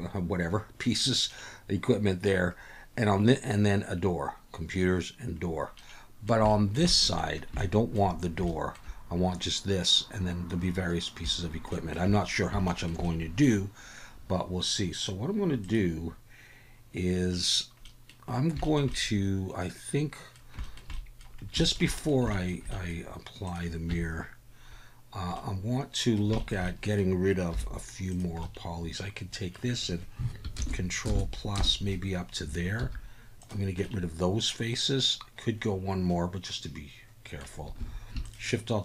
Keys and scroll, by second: 23.9 Tab, 27.5 3, 30.5 ctrl+KP_Add, 31.0 ctrl+KP_Add, 31.5 ctrl+KP_Add, 32.8 x, 37.8 alt+a.